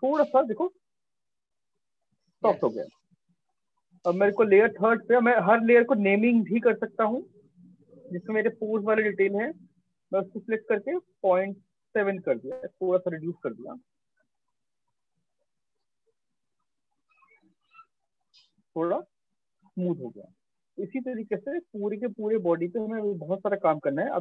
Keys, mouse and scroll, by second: 2.0 alt+click, 3.8 click, 9.9 click, 11.1 typing, 11.7 Return, 17.1 shift+click, 18.3 right click, 19.6 alt+click, 21.9 alt+click.